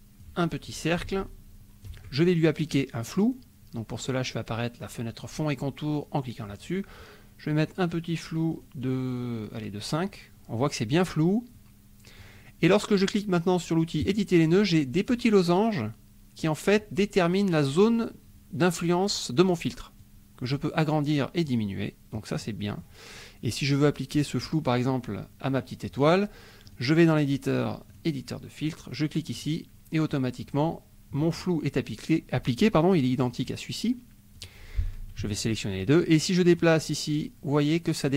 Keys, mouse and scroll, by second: 1.0 ctrl+shift+click, 3.0 click, 7.7 click, 8.1 click, 8.6 click, 9.4 click, 11.5 middle click, 14.0 click, 20.0 click, 21.4 click, 22.4 middle click, 22.5 click, 24.1 click, 24.9 click, 26.6 click, 28.0 click, 29.4 click, 30.1 middle click, 31.0 click, 33.2 click, 34.3 click, 35.3 shift+click, 36.5-38.1 drag.